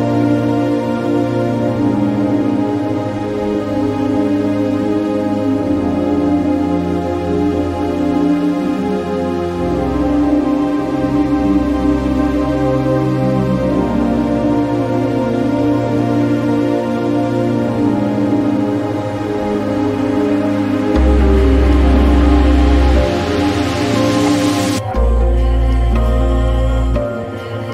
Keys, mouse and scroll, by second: 9.0-13.1 drag, 15.0-15.6 ctrl+scroll down 2, 16.3 click, 18.7 click, 22.1-24.0 drag.